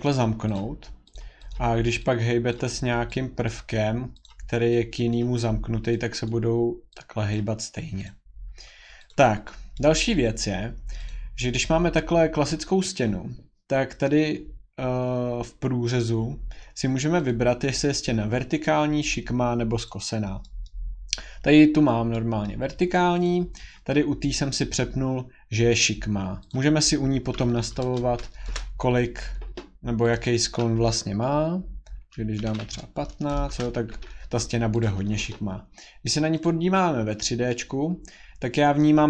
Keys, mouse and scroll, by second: 0.1 click, 0.6 click, 1.1 click, 1.5 click, 2.5 click, 3.5 click, 4.2 click, 5.1 click, 6.3 click, 7.3 click, 8.1 click, 8.4-9.1 scroll, 9.1 click, 10.1-10.7 scroll, 11.1 click, 17.2 click, 20.0 click, 20.7 middle click, 22.5 middle click, 23.2 click, 25.8-26.5 scroll, 26.5 click, 27.4 scroll, 27.5-28.3 typing, 30.1 click, 32.1-32.9 typing, 33.5 Return, 34.8 click, 36.4 click.